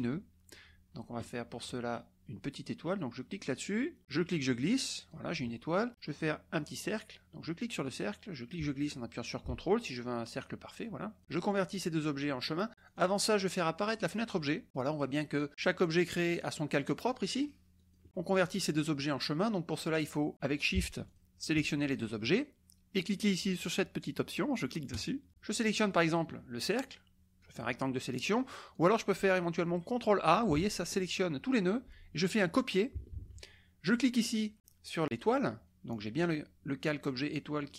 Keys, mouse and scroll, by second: 1.2 click, 3.5 click, 4.0 click, 7.6 click, 8.6 click, 12.9 click, 13.8 click, 14.3 middle drag, 14.4 click, 15.8 click, 16.4 click, 16.9 click, 17.5 click, 19.6 click, 21.0 shift+click, 24.9 click, 27.4-28.6 drag, 28.7 click, 30.5 ctrl+a, 33.1 ctrl+c, 33.8 click.